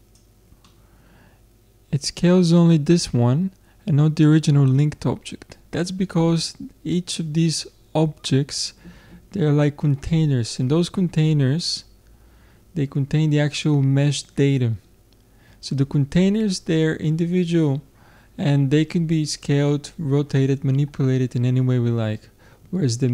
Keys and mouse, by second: 1.1-2.4 middle drag.